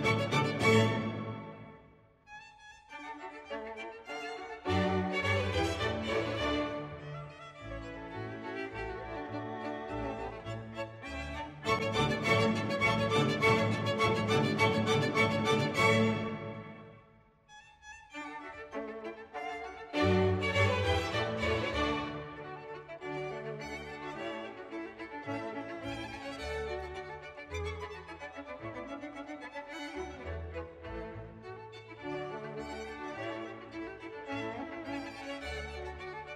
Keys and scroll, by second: 0.8 space, 34.6 ctrl+c.